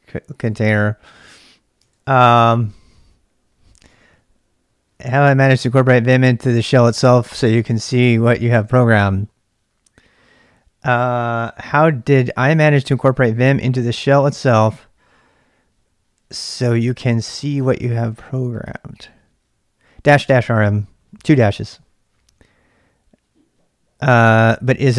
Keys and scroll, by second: 1.4 q, 1.8 ctrl+[, 1.9 ctrl+j, 2.2 shift+z, 2.3 shift+z, 3.8 t.